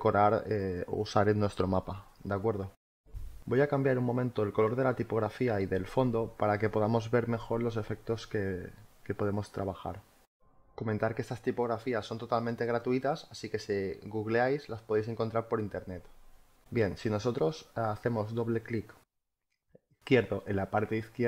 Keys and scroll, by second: 7.9 space, 12.7 g, 14.2 t.